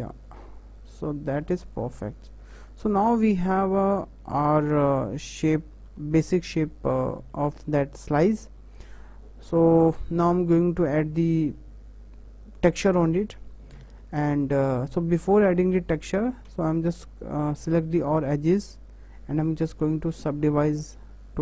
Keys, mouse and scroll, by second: 0.2-1.7 middle drag, 1.7 click, 2.0 scroll down 1, 2.1 Tab, 2.4-4.6 middle drag, 4.6 Tab, 5.1 Tab, 5.3 Tab, 5.7 Tab, 6.0 `, 6.9-7.3 scroll up 4, 7.3-7.7 shift+middle drag, 7.7-8.7 scroll down 4, 8.7-14.3 shift+middle drag, 14.3-14.8 scroll up 1, 14.8-16.0 shift+middle drag, 16.0 click, 16.5 Tab, 18.0 a, 19.9-21.4 right drag.